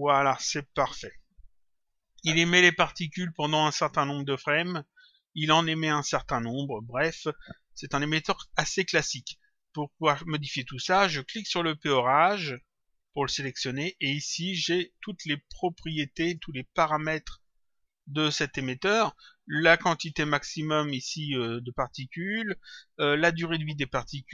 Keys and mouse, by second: 3.0 click, 4.5 click, 5.9 click, 9.0 click, 11.8 click, 13.2 click, 15.8 click, 17.4 click.